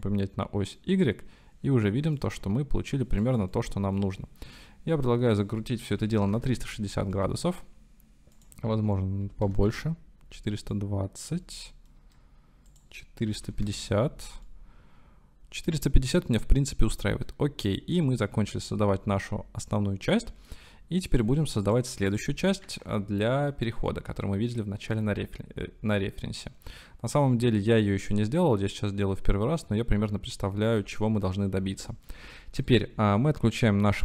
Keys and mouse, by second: 0.1 middle click, 2.3-3.3 drag, 3.5 middle click, 5.5-6.9 drag, 7.1 middle click, 8.5-10.5 drag, 10.8 middle click, 11.5 shift+middle click, 12.9-14.2 middle drag, 14.5-17.3 middle drag, 20.0 middle click, 21.2 middle drag, 21.7 middle click, 22.1 middle click, 22.7 ctrl+s, 27.8-30.7 middle drag, 30.9-31.4 shift+middle drag, 33.9-34.0 middle drag.